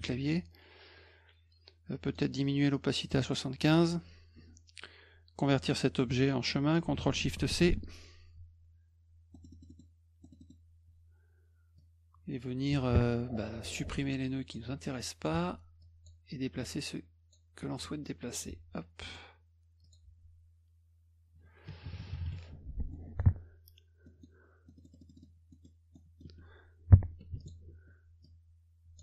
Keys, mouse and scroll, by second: 0.0 F2, 2.1 right click, 3.0 click, 7.4 ctrl+shift+c, 9.3 middle click, 9.5 middle click, 9.7 middle click, 10.2 middle click, 10.4 middle click, 11.8-14.5 drag, 15.0 click, 15.8 click, 16.6 click, 18.3 click, 19.1 click, 19.8 click, 22.9 middle click, 24.1 middle click, 24.7-25.6 scroll up 5, 25.9 middle click, 27.4 ctrl+alt+click, 28.2 click.